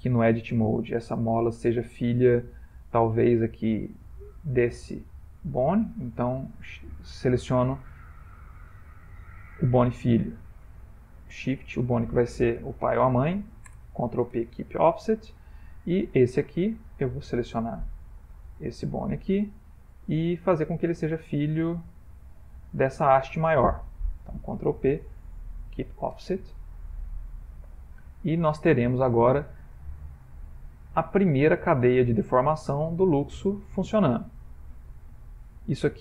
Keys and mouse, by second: 0.3 Tab, 0.9 click, 5.2 ctrl+click, 11.3 shift+click, 12.6 ctrl+p, 15.3 shift+middle click, 17.1 middle click, 18.6 click, 19.6 middle click, 23.5 shift+click, 24.9 ctrl+p, 26.7 ctrl+middle click, 27.6 middle click, 28.8 Tab, 29.0 middle click, 29.9 click, 30.6 ctrl+middle click, 32.6 r.